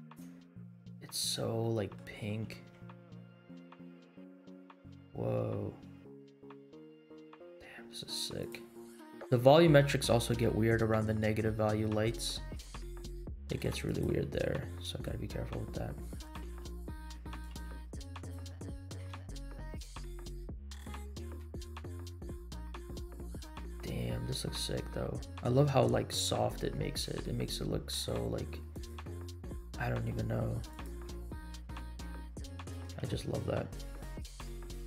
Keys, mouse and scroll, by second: 0.5 scroll down 2, 1.6 middle click, 2.3 g, 8.9-9.3 middle drag, 10.3 KP_Decimal, 11.9 middle click, 12.5 r, 14.1 g, 16.4 r, 17.6 g, 18.5 middle click, 19.0 shift+z, 20.9 click, 21.3 g, 31.0 click, 31.2 scroll up 1, 31.7 r, 32.9 g.